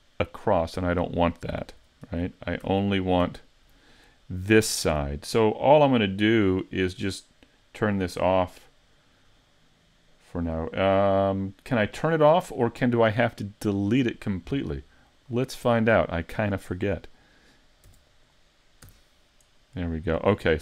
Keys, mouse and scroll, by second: 2.1 super+z, 2.6 super+z, 3.3 super+z, 15.2 click, 16.1 right click, 17.9 e, 18.2 click, 18.8 s.